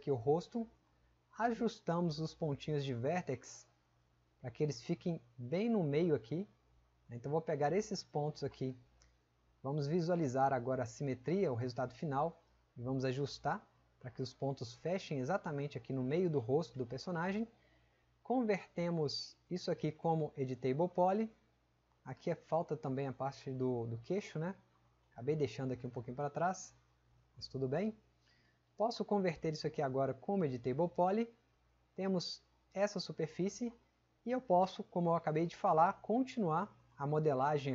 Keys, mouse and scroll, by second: 2.8 click, 3.9 click, 24.0-24.7 drag, 25.3-25.9 drag, 33.2 click, 35.4 click, 36.7 click.